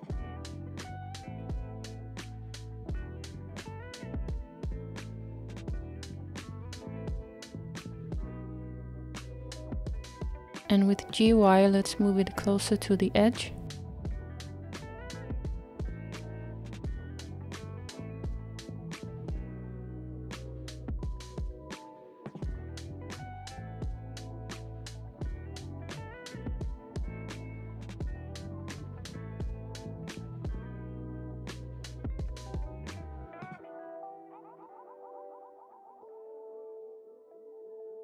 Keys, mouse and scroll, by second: 0.4-1.0 scroll down 2, 1.0-7.0 middle drag, 13.8-20.1 middle drag, 22.6 KP_1, 23.9-24.4 scroll up 3, 26.3 g.